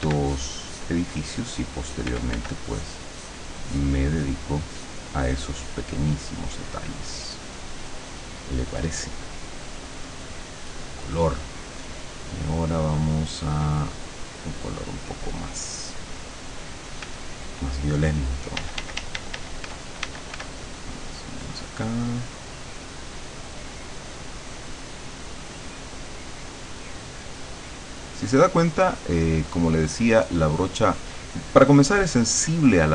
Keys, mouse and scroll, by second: 0.4-2.2 drag, 2.2 f, 2.7 click, 3.8 click, 5.3 click, 6.4-7.4 drag, 7.6 click, 10.6 click, 12.8-15.2 drag, 16.2 click, 17.1 f, 18.6-20.9 typing, 20.7 click.